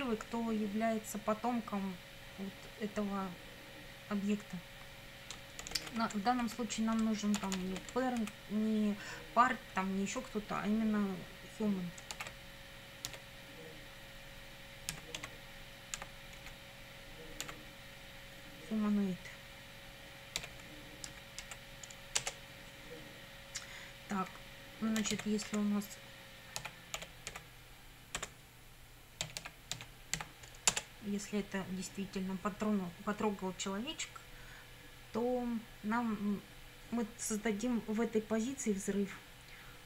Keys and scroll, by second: 5.4-6.2 typing, 6.4 Left, 7.4 shift+', 8.2 Left, 12.2 shift+h, 13.1 u, 14.9 m, 15.2 a, 16.0 n, 16.4 o, 17.4 i, 20.4 d, 21.1 Right, 22.2 Return, 24.7-30.7 typing, 30.7 Return, 39.7-39.8 typing.